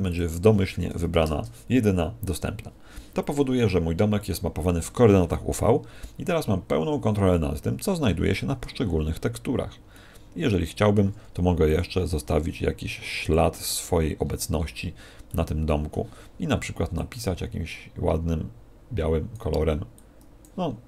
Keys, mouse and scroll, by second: 7.9 Escape, 9.8 middle click, 10.6 middle click, 11.6 click, 13.7-15.2 scroll up 10, 15.2 middle click, 15.2 scroll up 1, 16.9 click, 19.9 click.